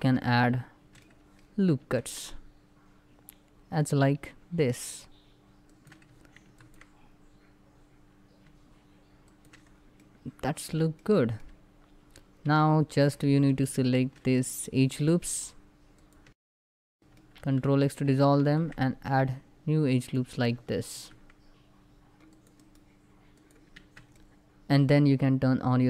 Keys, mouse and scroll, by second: 0.1-1.4 shift+middle drag, 1.4 ctrl+r, 1.6 ctrl+click, 4.5 shift+Caps_Lock, 4.5 ctrl+click, 6.0 ctrl+r, 6.2 ctrl+click, 9.4 scroll down 1, 9.8 middle click, 10.3 scroll up 1, 10.6 shift+middle click, 12.2 c, 12.3 c, 12.4 alt+click, 12.7 middle click, 13.0 alt+click, 14.6 middle click, 14.7 ctrl+z, 14.9 alt+shift+click, 15.0 middle click, 15.4 alt+shift+click, 17.0 middle click, 17.2 ctrl+x, 18.1 ctrl+r, 18.3 ctrl+scroll up 2, 19.6 click, 20.0 right click, 20.6 ctrl+r, 20.8 ctrl+scroll up 2, 22.0 click, 22.3 right click, 23.1 click, 23.5 Tab, 23.9-25.6 middle drag, 25.6 click.